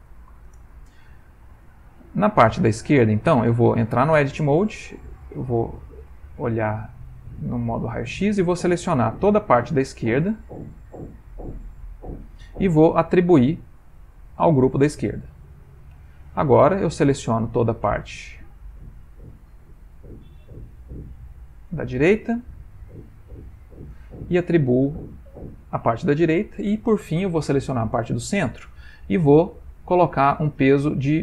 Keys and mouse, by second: 1.9 ctrl+middle click, 4.2 Tab, 5.3 z, 9.0 click, 10.9 shift+click, 14.0 click, 15.6 click, 16.8 click, 18.6 alt+shift+click, 23.0 alt+shift+click, 24.9 click, 25.5 click, 27.6 alt+click.